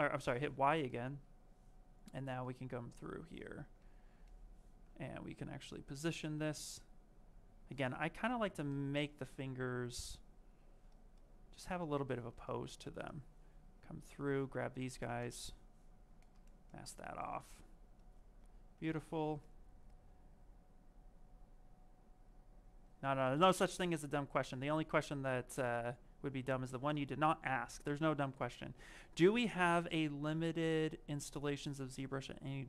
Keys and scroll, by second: 15.0 ctrl+shift+a.